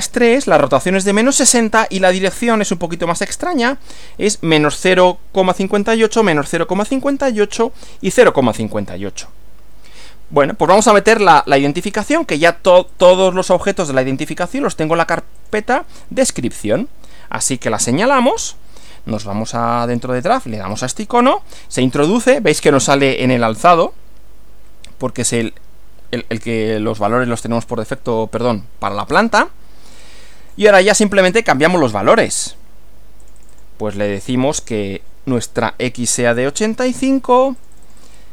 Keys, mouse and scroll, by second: 1.4-2.0 drag, 2.5 click, 3.5 click, 12.9 click, 15.3 click, 16.7 click, 19.2 click, 20.8 click, 30.0-30.7 drag, 31.3 click, 33.3 click, 36.5 8, 37.6 click.